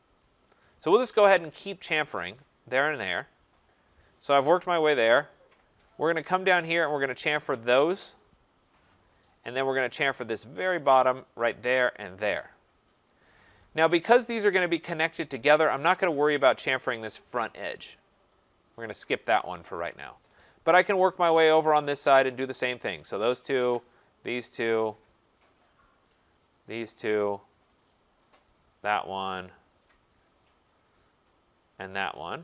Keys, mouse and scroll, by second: 0.6 right click, 1.4 right click, 1.8 click, 2.3 click, 3.3 middle click, 3.4 middle click, 3.9-4.5 scroll, 4.8 scroll, 5.9 right click, 6.7 right click, 7.2 click, 7.6 click, 8.9 scroll, 10.0 right click, 10.2-11.1 scroll, 11.1 right click, 11.5 click, 12.1 click, 14.6 right click, 20.4 scroll, 21.3-22.0 scroll, 22.0 right click, 22.3 click, 22.8 click, 23.4 right click, 23.9 click, 24.3 click, 25.3 right click, 26.0 right click, 26.4 click, 26.9 click, 27.3-27.9 scroll, 27.9 right click, 28.2 click, 28.8 click, 29.8 right click, 30.3 right click, 30.7 click, 31.6 click, 32.1 middle click, 32.2 middle click.